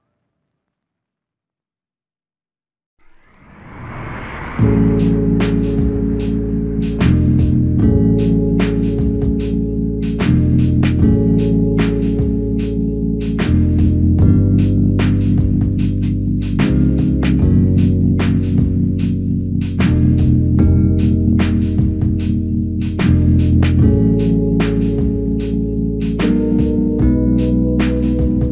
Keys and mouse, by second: 2.3 ctrl+click, 6.9 w, 7.6 w, 8.0 alt+click, 10.5 alt+click, 14.7 ctrl+click, 18.6-20.1 typing, 24.7 double click.